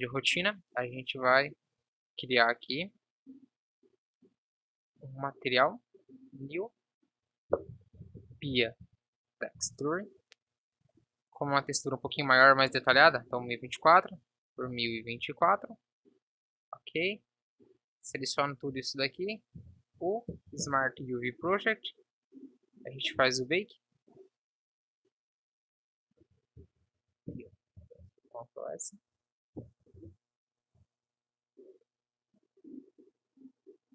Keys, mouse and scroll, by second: 1.4 click, 1.9 t, 17.9 Tab, 18.9 a, 19.7 u, 20.9 Return, 28.0 ctrl+s.